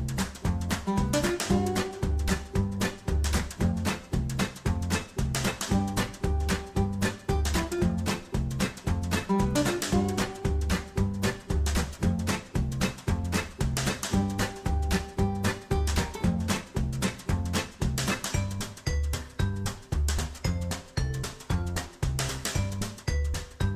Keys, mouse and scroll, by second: 0.7-1.0 scroll down 2, 1.0 scroll up 2, 1.2-1.6 scroll down 2, 2.0 click, 2.4 scroll up 2, 3.3 middle click, 4.3-4.6 scroll up 2, 4.9 scroll down 2, 5.6 middle click, 6.1-6.6 scroll up 1, 6.6 scroll down 2, 7.2-8.3 scroll up 2, 8.3 middle click, 9.7-10.3 scroll down 2, 10.4 middle click, 11.9 click, 15.2 click, 17.2 ctrl+Tab, 19.0 click, 21.3 scroll up 2, 22.0 click, 22.3 ctrl+Tab, 23.2 scroll down 2.